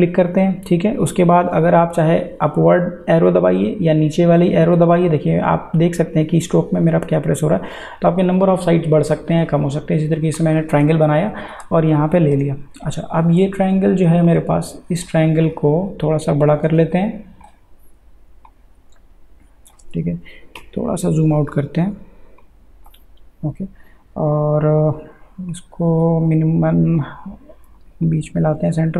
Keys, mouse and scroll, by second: 2.4 Up, 9.0 Down, 14.2 click, 16.8 alt+shift+space, 18.5-20.6 drag, 20.6 ctrl+-, 22.4-28.9 drag.